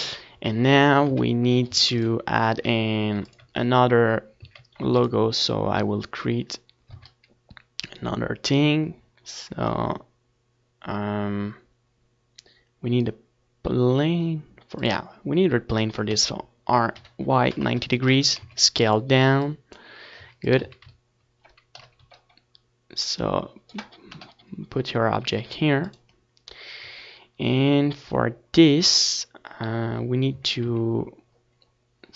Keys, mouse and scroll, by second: 0.7 s, 1.4 Tab, 1.6 ctrl+s, 2.3 KP_1, 3.6 KP_3, 4.3 a, 4.5 ctrl+s, 5.8 ctrl+s, 7.1 z, 7.5 ctrl+s, 8.5 shift+c, 9.6 shift+a, 19.2 r, 21.1-23.2 drag, 21.6 s, 23.2-25.1 middle drag, 23.4 s, 23.7 z, 25.1 click, 25.1 KP_1, 26.2-27.8 drag, 27.4 KP_3, 28.7 s, 29.0-30.6 drag, 30.0 Tab, 31.2 z.